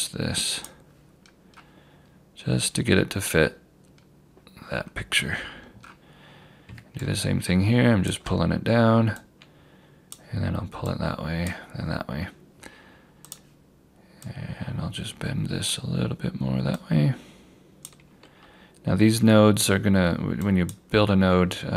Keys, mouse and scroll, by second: 1.3-3.1 scroll down 1, 5.5-7.1 scroll up 1, 7.1 click.